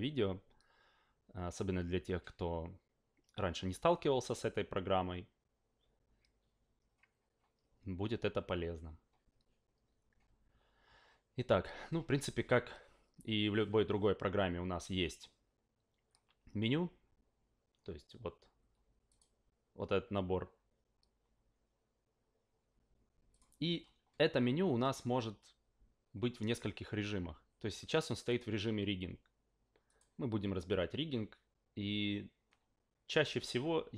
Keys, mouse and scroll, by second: 19.1 click, 23.3 click, 28.3 click, 29.8 click.